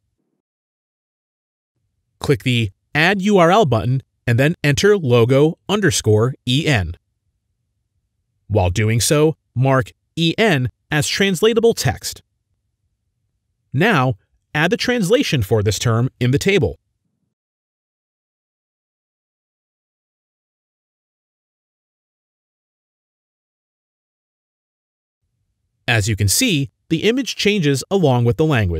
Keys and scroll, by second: 1.1 typing, 5.0-8.4 typing, 8.6 Left, 8.8 Left, 9.7-11.5 typing, 10.6 Right, 20.0-22.9 typing, 24.8-25.6 typing, 27.8 typing.